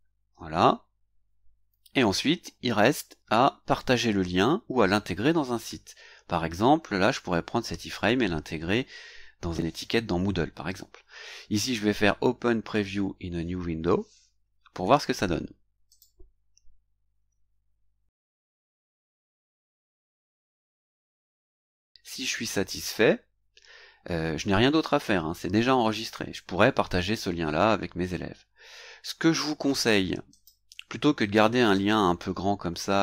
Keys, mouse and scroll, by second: 0.7-1.7 scroll down 3, 1.7-4.6 scroll up 2, 4.6 scroll down 2, 6.2 scroll down 2, 15.8 click, 30.3 click, 31.7-33.0 drag.